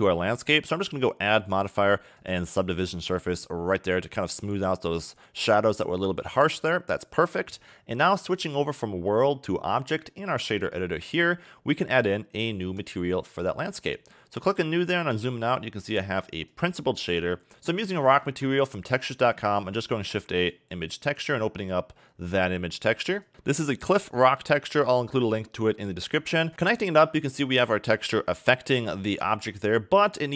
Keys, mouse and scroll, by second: 2.6 click, 8.4 click, 12.8 click, 13.9-14.7 scroll down 12, 14.7 middle click, 15.0-16.5 scroll up 9, 16.5 click, 18.2 shift+a, 21.6 click, 29.6 click.